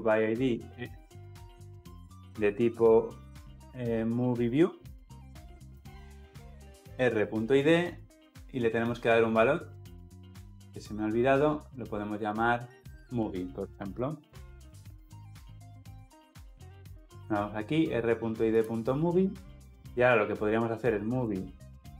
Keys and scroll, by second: 0.1 Return, 5.6 Return, 9.9 Escape, 19.5 Return, 21.8 Return.